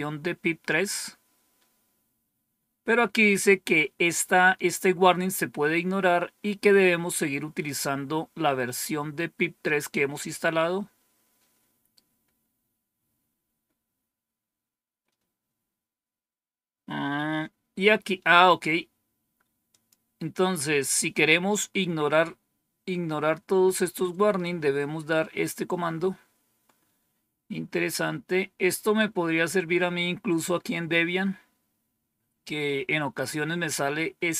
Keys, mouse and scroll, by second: 19.6 click, 20.5 scroll down 2, 26.8-28.0 scroll down 2, 28.4-29.1 scroll down 2, 29.1 scroll down 1, 29.2 scroll up 1.